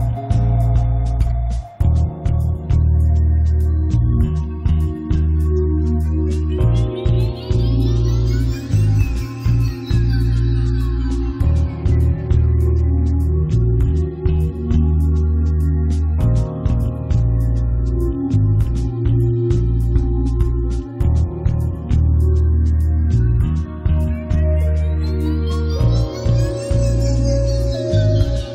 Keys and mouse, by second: 0.0-1.8 drag, 1.8-3.4 middle drag, 3.4 click, 3.6 middle click, 4.4-6.0 middle drag, 6.0-7.8 drag, 7.8 ctrl+z, 8.1-12.5 drag, 12.5 1, 14.1-16.1 drag, 14.7-16.3 right drag, 16.1 middle click, 16.8-18.3 drag, 17.0 right click, 17.2 f, 17.4 middle click, 18.3 8, 18.7-20.9 drag, 18.7 middle click, 20.9 ctrl+z, 21.2 1, 22.2-24.0 drag, 24.0 middle click, 24.6 click, 25.2 middle click, 25.5-27.8 typing.